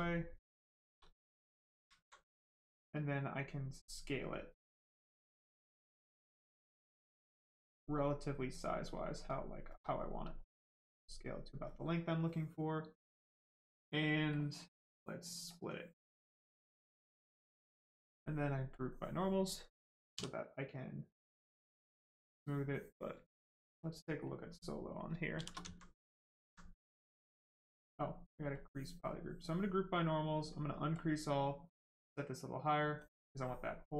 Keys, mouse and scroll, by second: 0.0 right click, 1.9 alt+right click, 3.2 right click, 5.6 click, 6.6 right click, 7.8 click, 8.6 right click, 10.4 shift+click, 14.3 click, 16.1 alt+click, 18.7 click, 20.1 d, 24.8 right click, 25.3 shift+f, 25.7 alt+right click, 26.2 alt+right click, 26.6 right click, 26.6 right click, 28.5 click, 30.9 click.